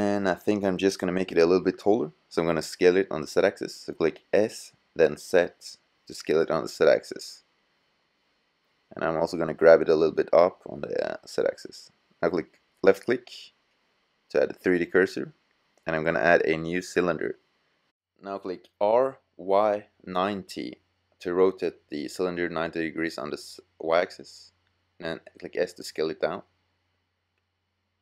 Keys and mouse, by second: 4.1 s, 4.3 middle click, 6.2 click, 7.1 g, 7.4 click, 7.6 click, 13.2-15.0 drag, 16.2-17.9 drag, 18.1 r, 24.1 s, 25.9 click, 26.7 g, 26.8 click, 27.7 click.